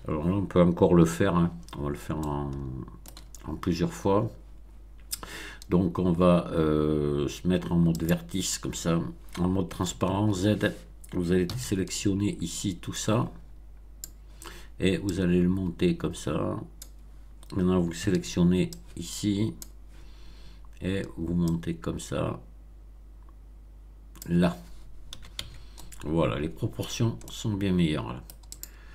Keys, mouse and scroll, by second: 0.9 1, 1.8 scroll up 3, 2.1-3.2 shift+middle drag, 7.9 click, 9.8 z, 11.4 b, 12.9-14.1 drag, 15.0-16.9 drag, 17.9 b, 18.6 click, 21.4-24.3 drag, 25.1 z, 25.3 Tab, 25.7-26.8 middle drag, 26.8-27.1 scroll down 1, 27.2-28.4 middle drag, 28.5 click.